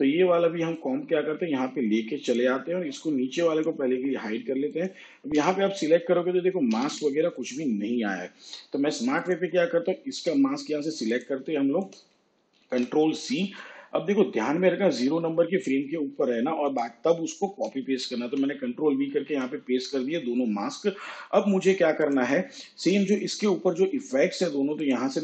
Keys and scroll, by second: 5.6 m, 7.0 m, 10.4 m, 12.8 ctrl+c, 18.5 ctrl+v.